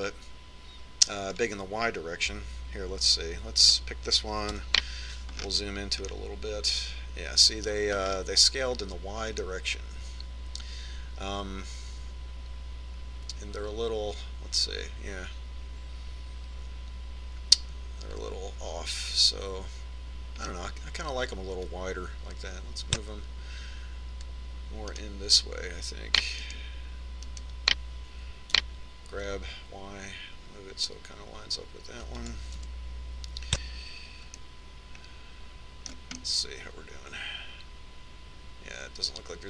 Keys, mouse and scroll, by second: 4.7 right click, 5.6 KP_Decimal, 6.4-8.8 middle drag, 9.1-12.5 middle drag, 22.8-24.5 drag, 26.1-30.4 right drag, 29.8 g, 33.8 KP_3, 35.6-39.3 middle drag.